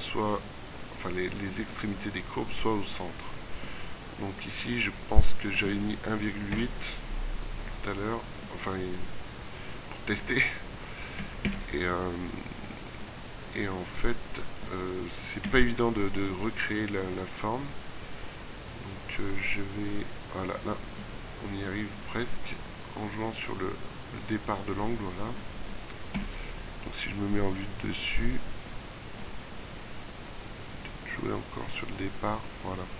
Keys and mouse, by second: 15.5 KP_3, 26.1 KP_7.